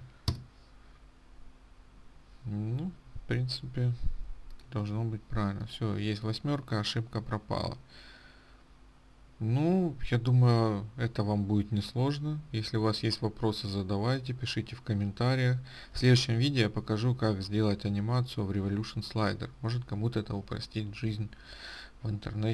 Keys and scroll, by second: 0.8 Return.